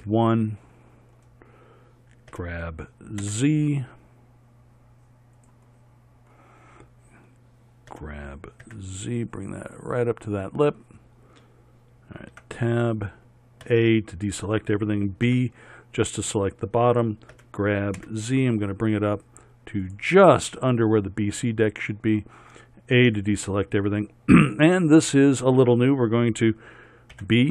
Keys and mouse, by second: 0.0 KP_1, 2.4 g, 8.0 g, 12.4 Tab, 13.7 a, 15.3 b, 17.4 g, 23.1 a, 27.2 b.